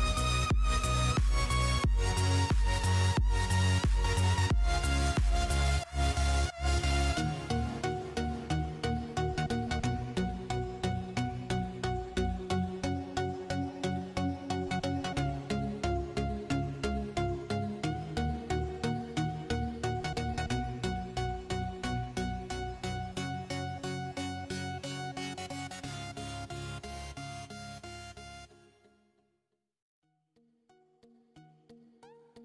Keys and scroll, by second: 0.0-0.1 typing, 2.0-5.5 typing, 30.7-32.4 typing.